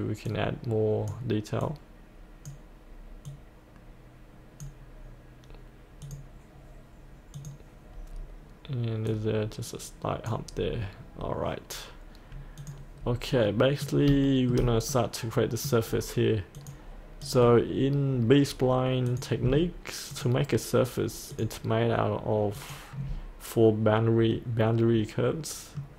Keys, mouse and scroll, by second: 0.5-5.6 drag, 8.2-9.1 scroll down 1, 9.1-10.7 drag, 11.2-12.6 scroll up 1, 12.6 click, 13.5 middle click, 13.7-14.1 scroll up 1, 14.3 shift+middle click, 14.9 middle click, 15.9-16.6 scroll down 1, 16.6 click, 20.1 ctrl+click, 21.3 ctrl+click, 22.6 ctrl+click, 24.3 middle click.